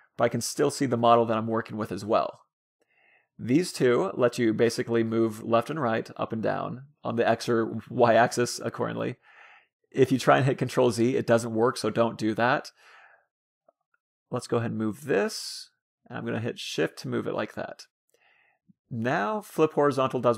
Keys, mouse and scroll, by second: 4.4-6.0 drag, 6.6-8.1 drag, 7.7 ctrl+z, 8.4-9.8 drag, 11.5-13.0 drag, 19.6-20.3 drag.